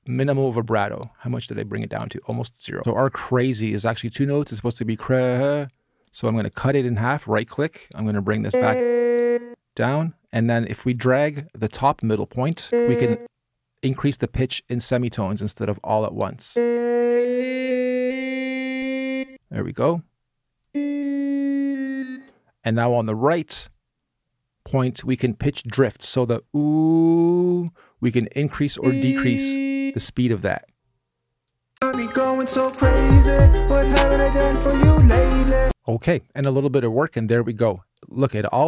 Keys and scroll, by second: 0.6 super+a, 2.7 space, 31.5 space.